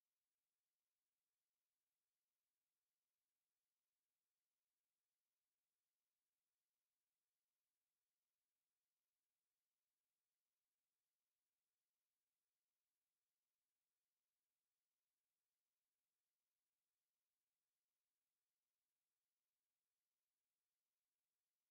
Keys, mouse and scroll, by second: 1.2 space, 3.8 click, 5.6 click, 6.4 click, 8.4-10.1 drag, 10.7 click, 12.0 click, 14.4 click, 17.4-18.2 drag, 20.1-21.0 drag.